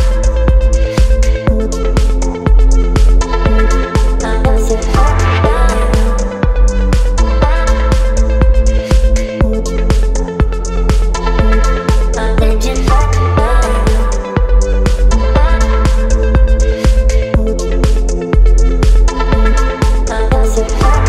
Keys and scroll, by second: 12.8 b, 15.5 [, 19.4 [.